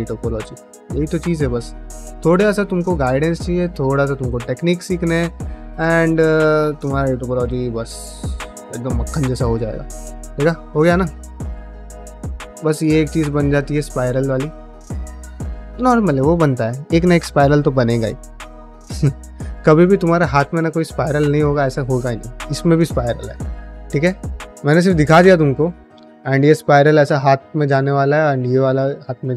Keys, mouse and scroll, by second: 0.0 g, 0.4 click, 0.9 click, 1.5 click, 1.6 g, 2.0 middle click, 2.5 click, 2.7 g, 3.3 click, 3.3 g, 3.8 click, 4.0 g, 4.4 click, 4.6 g, 5.0 click, 5.5 middle click, 6.1 click, 6.3 g, 6.7 middle click, 7.2-9.0 middle drag, 9.5 ctrl+middle click, 9.8 middle click, 10.3 click, 10.5 g, 10.8 middle click, 11.9 3, 12.3 alt+click, 12.6-15.7 middle drag, 15.8-19.1 middle drag, 23.6 middle click, 24.6 middle click, 25.3 middle click, 27.4 ctrl+middle click, 27.7 middle click, 28.4 middle click.